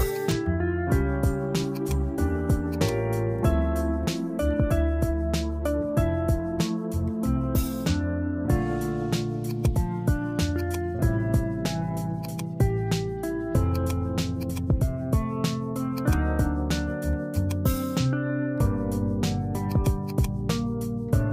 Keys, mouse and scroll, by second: 1.9-5.5 drag, 6.3 f, 10.7-13.8 drag, 14.6-17.4 drag, 19.7-21.3 drag.